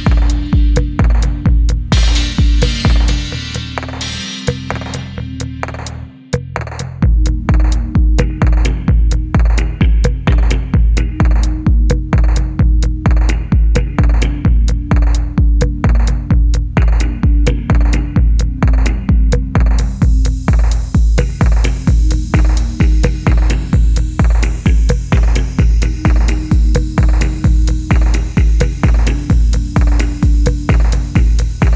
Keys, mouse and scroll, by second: 1.3 double click, 2.2 middle click, 6.6 middle click, 7.8 typing, 8.6 double click, 8.9-12.0 scroll down 1, 12.0 scroll down 1, 12.1 middle click, 15.0 middle click, 15.2-15.6 scroll up 1, 15.6 middle click, 16.4-17.6 typing, 17.7 middle click, 21.1 double click, 25.0 middle click, 26.0 scroll down 1, 26.2 middle click, 29.6 middle click, 29.6-31.6 scroll up 2, 29.9 middle click.